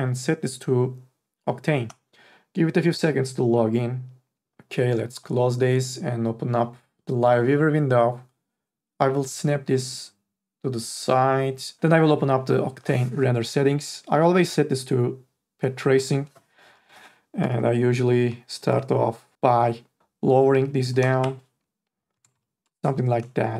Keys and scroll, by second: 17.7 5, 20.9 KP_1, 21.2 Return, 22.1 KP_1, 22.5 KP_0.